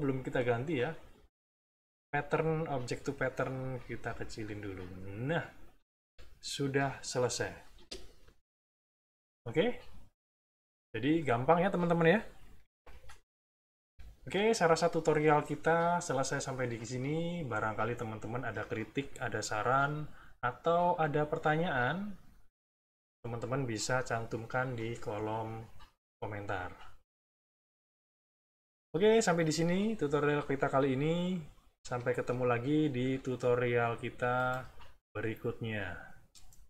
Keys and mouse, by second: 0.7 click, 2.7 click, 3.9-6.1 ctrl+drag, 7.7 space, 8.2 click, 8.8 click, 9.4-11.3 drag, 13.8 Delete, 36.3 click.